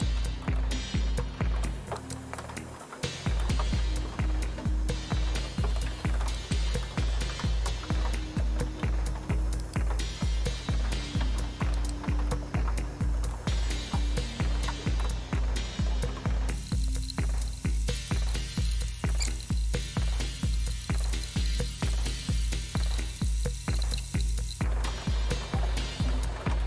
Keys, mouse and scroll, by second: 2.0 click, 6.4 click, 9.6 click, 11.8 click.